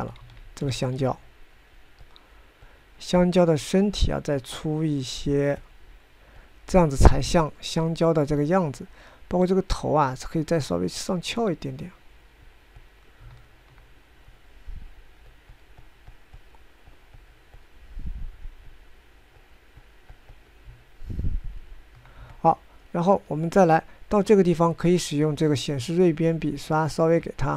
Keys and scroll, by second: 1.3 ctrl+z, 1.8 ctrl+z.